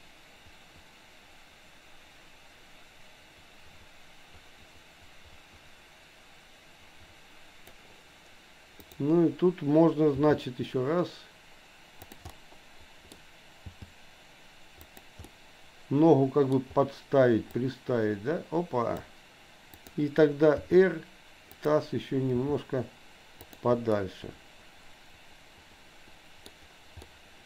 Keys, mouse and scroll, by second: 8.8 click, 10.1 g, 12.3 scroll up 1, 12.5 middle click, 13.7 g, 15.2-16.6 middle drag, 17.5-19.2 drag, 19.7 click, 20.5 r, 22.5 g, 24.0 scroll up 1, 24.1-26.5 middle drag, 26.5 scroll down 1, 27.1 middle click.